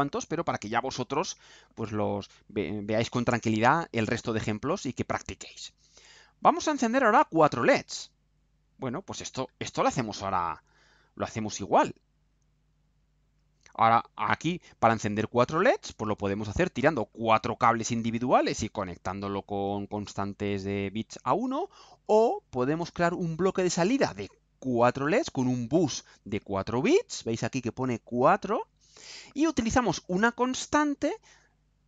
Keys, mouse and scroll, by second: 3.6 click, 7.2 click, 8.4 click, 12.0 click, 12.8-14.5 right drag.